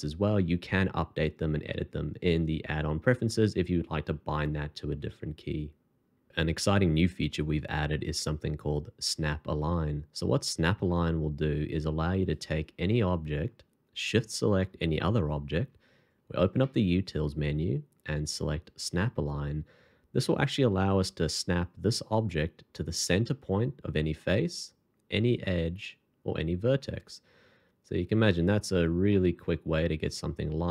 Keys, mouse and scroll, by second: 13.9 shift+click, 16.2 alt+t, 28.6 double click, 29.1 middle click.